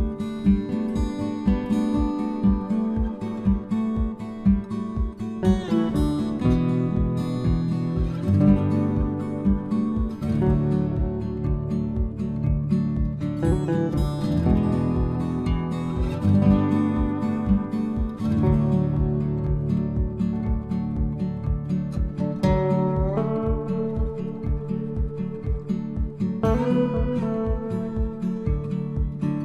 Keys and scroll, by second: 8.3 ctrl+c, 8.9 ctrl+v.